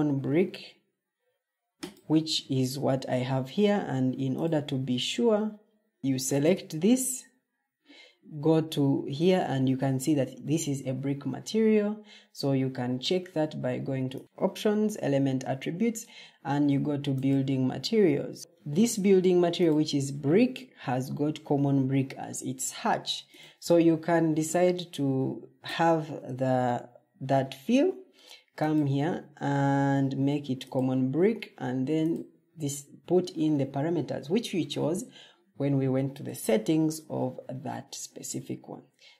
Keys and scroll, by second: 5.1 Escape, 11.1 Escape.